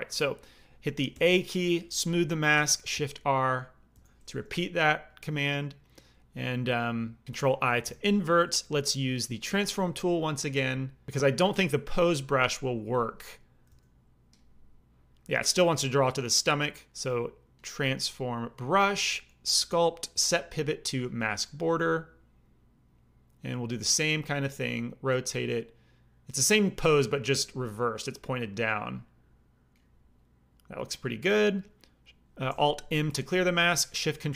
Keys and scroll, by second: 1.1 a, 2.9 shift+r, 3.9 shift+r, 7.8 ctrl+i, 12.7 f, 13.6 f, 32.9 alt+m.